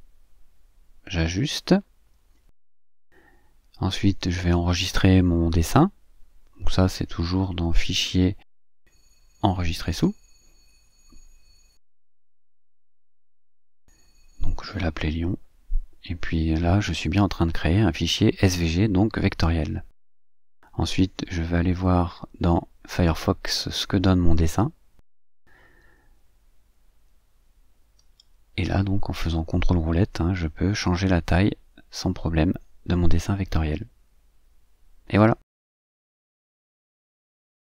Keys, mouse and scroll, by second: 0.2 2, 0.5 Tab, 0.6 2, 0.8 Tab, 1.0 2, 1.2 Tab, 1.4 2, 2.7 click, 4.7 click, 8.8 click, 13.0 click, 15.3-17.4 typing, 18.6 Caps_Lock, 18.8-20.1 typing, 20.3 Return, 27.0-28.4 drag, 30.6-31.0 ctrl+scroll up 2, 31.8 ctrl+middle click, 31.8-32.2 ctrl+scroll, 34.8-35.5 scroll up 2, 36.3 scroll up 1.